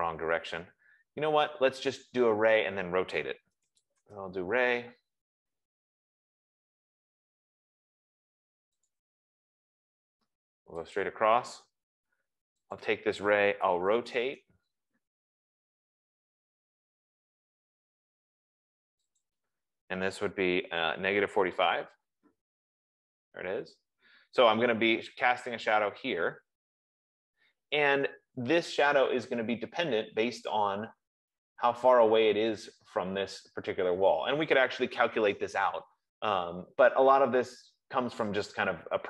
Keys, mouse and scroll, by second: 1.1 Escape, 3.8 click, 4.0-4.8 typing, 6.9 typing, 8.6 F15, 9.2 click, 11.2 click, 13.1 Return, 13.1 click, 14.4 typing, 19.8 click, 20.8-21.9 typing, 23.8 scroll, 28.8 middle click, 29.7 middle click, 30.1 middle click, 31.7 middle click, 31.8 middle click, 34.8 scroll down 3.